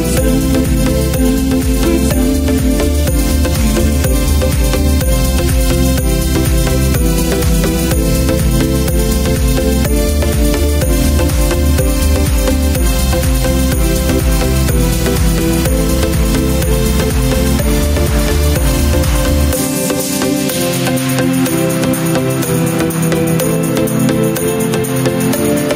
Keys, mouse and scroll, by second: 2.3 ctrl+z, 3.2-4.5 drag, 4.9 alt+c, 5.8 click, 6.9 click, 8.2 shift+click, 9.4 shift+click, 11.2 click, 16.0 click, 17.3-18.7 drag, 19.9 click, 21.9-23.4 drag, 24.7 click.